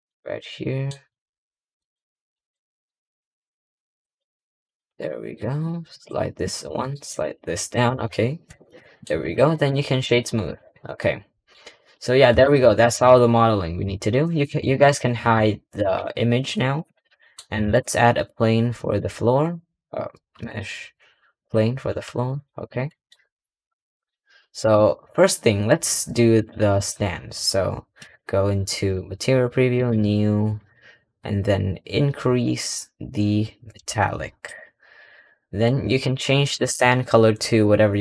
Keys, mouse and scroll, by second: 1.1 ctrl+r, 2.6 ctrl+r, 4.8 ctrl+r, 6.6 ctrl+r, 7.8 Tab, 8.0-8.4 scroll down 3, 8.4 click, 8.6-9.1 middle drag, 9.1 click, 9.4-10.4 right drag, 10.4 click, 10.8 middle click, 11.6-11.9 scroll down 3, 12.2 click, 12.7 click, 14.7 shift+click, 15.7 h, 16.6 click, 17.0-17.5 middle drag, 17.5 shift+a, 21.8 s, 22.5 click, 22.8 middle drag, 23.0-24.5 scroll down 2, 24.5 click, 24.9-26.2 scroll up 6, 26.2 click, 26.6 click, 27.9 click, 29.6-31.4 drag, 31.4-32.7 scroll down 5, 32.7-33.6 scroll down 1, 33.6-34.8 drag, 34.8-35.9 scroll up 2, 35.9 click.